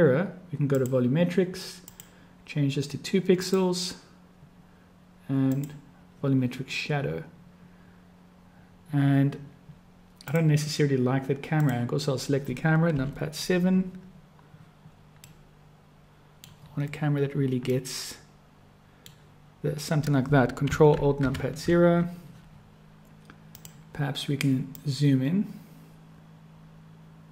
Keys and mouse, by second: 0.7 click, 1.9-3.8 drag, 5.4 click, 10.3 click, 11.5 click, 12.8 KP_7, 15.4-16.6 drag, 17.8-19.2 drag, 17.8-19.2 middle drag, 17.8-19.2 right drag, 21.2 ctrl+alt+KP_0, 23.6 click, 24.8-27.3 drag.